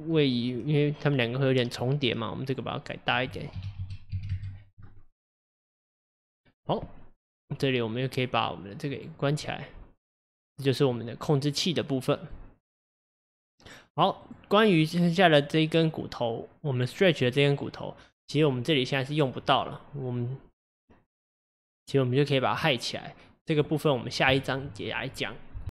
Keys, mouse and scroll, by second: 0.2-3.2 middle drag, 3.2-5.6 drag, 7.5 click, 9.0 click, 9.5-14.2 middle drag, 14.2 click, 15.3-18.3 middle drag, 23.6-25.7 middle drag.